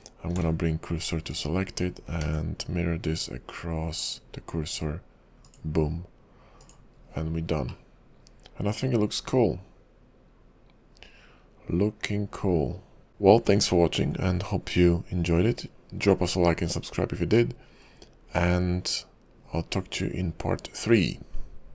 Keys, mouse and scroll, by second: 0.4 shift+s, 1.4 click, 2.3 alt+x, 5.7 click, 6.7 click, 7.2-7.9 scroll down 3, 7.9 middle click.